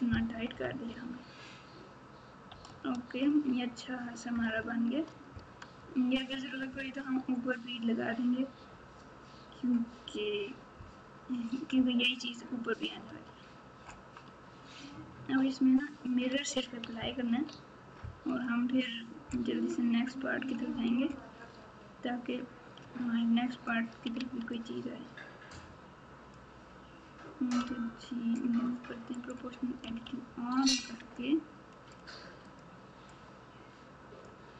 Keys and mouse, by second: 0.3 KP_8, 0.5 KP_8, 0.8 KP_1, 2.5-3.3 KP_Subtract, 4.3 KP_Add, 4.5 KP_Add, 13.0 Tab, 14.2 Tab, 17.3 ctrl+a, 21.4 Tab, 22.8 1, 24.1 alt+z, 24.5 click, 24.9-26.3 drag, 27.6 g, 29.8 o, 30.7 g, 33.1-34.2 drag.